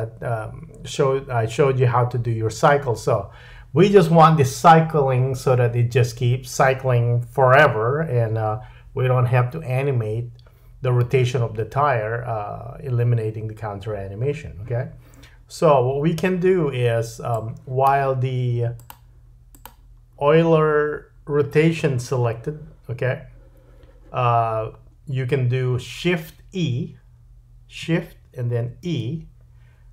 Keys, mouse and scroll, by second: 17.3 click, 18.9-19.5 drag, 19.5 middle click, 19.6-28.8 drag, 28.8 shift+e.